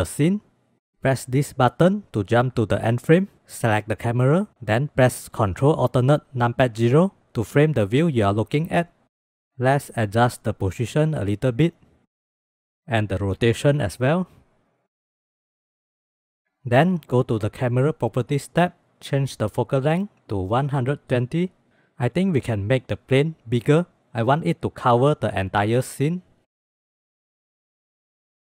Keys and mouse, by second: 2.4 click, 3.3 ctrl+s, 5.8 ctrl+alt+KP_0, 9.6 click, 10.4 KP_3, 12.5 KP_5, 12.8 middle click, 18.7-21.7 drag, 26.4 click, 27.8-28.5 drag.